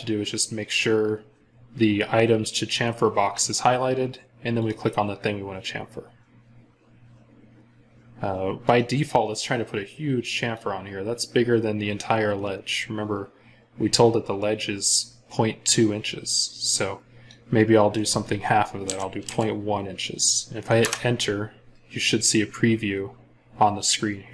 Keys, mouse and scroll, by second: 18.7-19.1 typing, 20.6 Return.